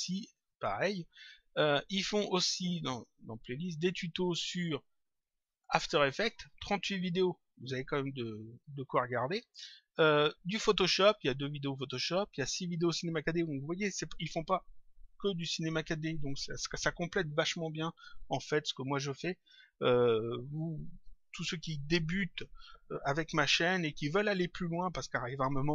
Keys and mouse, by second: 2.5 click, 20.6 click.